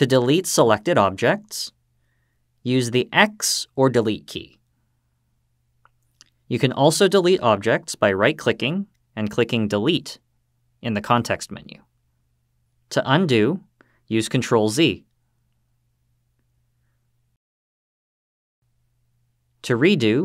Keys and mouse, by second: 3.0 x, 5.9 click, 6.7-10.2 right drag, 13.6 ctrl+z, 14.6 ctrl+z, 16.4 ctrl+z.